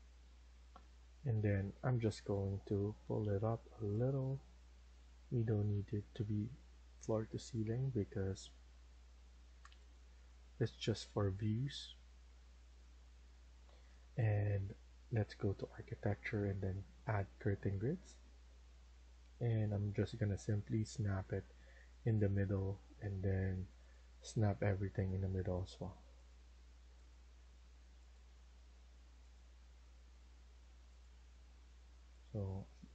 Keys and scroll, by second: 0.1 alt+Escape, 1.7 Escape, 5.7 Escape, 8.3 Escape, 11.5 Escape.